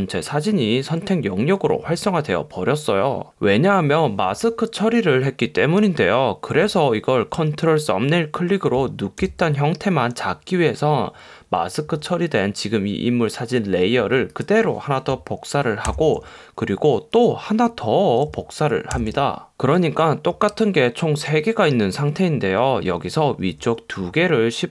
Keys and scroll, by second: 9.3 super+d.